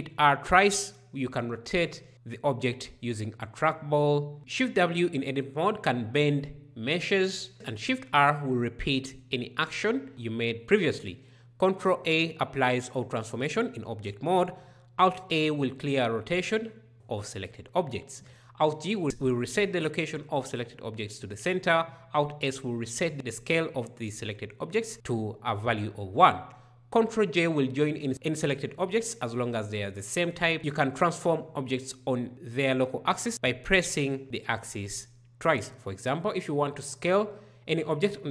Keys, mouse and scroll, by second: 1.7 r, 4.4 shift+w, 7.5 shift+r, 11.3 ctrl+a, 14.5 alt+a, 18.8 alt+g, 21.1 alt+a, 22.7 alt+s, 27.2 ctrl+j.